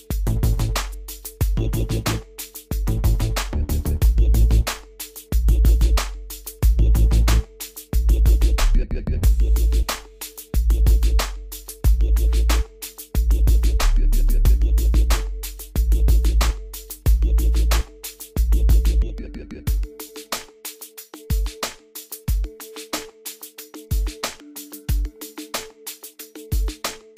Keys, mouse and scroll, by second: 1.0 ctrl+z, 2.5 click, 6.0 click, 12.2-12.5 scroll down 1, 14.1 click, 15.7 scroll up 1, 16.3-16.9 scroll down 1, 20.3 click, 25.5 click, 26.5 Escape.